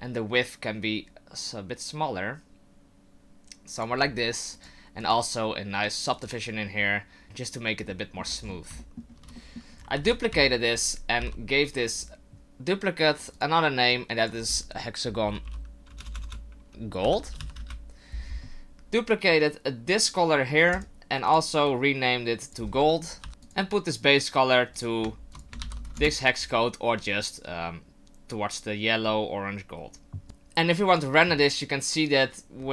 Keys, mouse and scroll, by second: 4.5 click, 5.0 click, 7.9 middle click, 8.2-8.8 scroll down 10, 8.8 shift+middle click, 9.3 middle click, 10.0 shift+d, 13.2 click, 13.3 click, 15.5 =, 16.1 BackSpace, 16.2 BackSpace, 20.7 click, 21.3 click, 23.4 click, 30.2 click, 30.9 click.